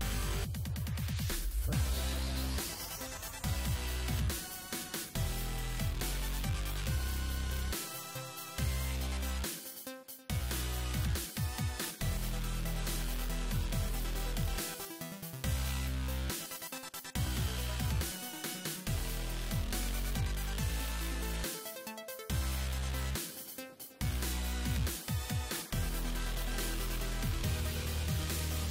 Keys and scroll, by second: 12.5 s, 21.6 s.